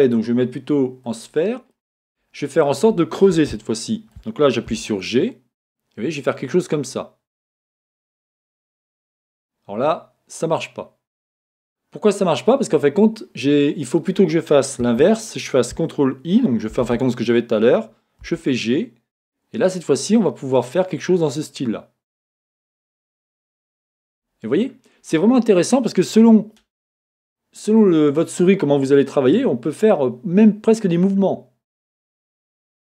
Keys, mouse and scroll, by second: 0.1-1.7 drag, 1.7-11.1 middle drag, 2.3 scroll up 2, 5.1 g, 15.0 Escape, 15.0-32.9 middle drag, 16.8 ctrl+i, 18.6 g.